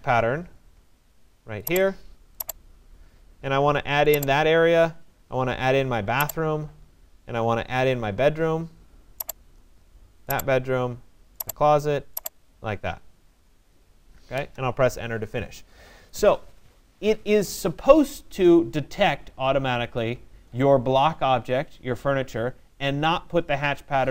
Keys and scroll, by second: 14.0 Return.